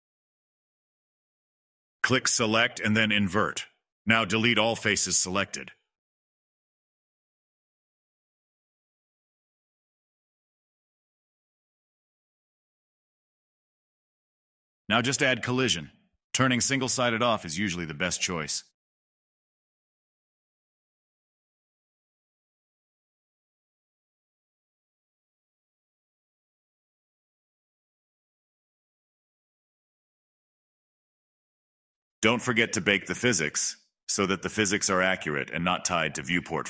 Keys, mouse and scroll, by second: 5.7 Delete, 8.1-9.3 middle drag, 9.3 scroll up 4, 9.4-10.6 middle drag, 10.6-12.0 right drag, 12.5 click, 13.1-13.5 right drag, 13.1 middle click, 13.5 click, 13.9-14.9 right drag, 13.9 middle click, 14.9 click, 15.5-15.9 middle drag, 15.9 click, 16.4 middle click, 17.3 click, 18.3-19.5 drag, 19.5-20.6 scroll down 1, 20.6-23.9 drag, 23.9-25.7 middle drag, 25.7 click, 26.8 click, 27.2-28.6 middle drag, 28.6 click, 28.9 middle click, 29.1 middle click, 29.1 space, 29.4-29.8 scroll up 1, 29.8 middle click, 30.2 space, 30.3 click, 30.9 click, 31.5 click, 31.7 click, 31.9 click, 32.2 Delete, 32.3 drag, 32.4 space, 32.7 space, 32.7 middle drag, 33.0 space, 33.1 space, 33.4 click, 34.5 scroll down 1, 34.6 middle click, 34.7 click, 34.9 click, 35.4-35.8 scroll down 25, 35.8-36.6 drag.